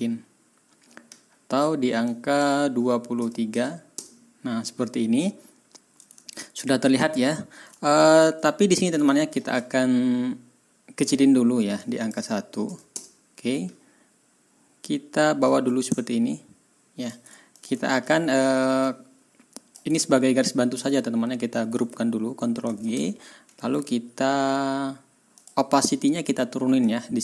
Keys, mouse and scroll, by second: 2.0 click, 3.1 KP_2, 3.5 KP_3, 3.9 Return, 6.7-7.1 ctrl+scroll down 2, 7.2 ctrl+scroll up 2, 9.1 ctrl+scroll down 2, 11.8 click, 12.6 KP_1, 12.9 Return, 15.4-17.2 drag, 17.8 ctrl+click, 20.0 ctrl+scroll up 2, 22.6 ctrl+g, 23.6 right click, 25.3 click, 26.8-27.2 drag.